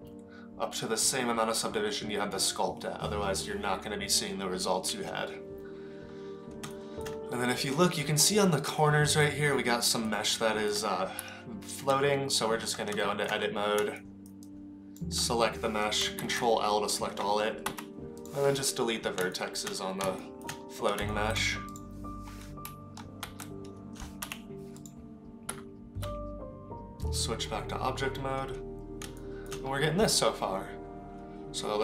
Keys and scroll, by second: 11.2 Tab, 16.3 ctrl+l, 17.7 Delete, 23.3 ctrl+l, 24.2 Delete, 25.5 Tab.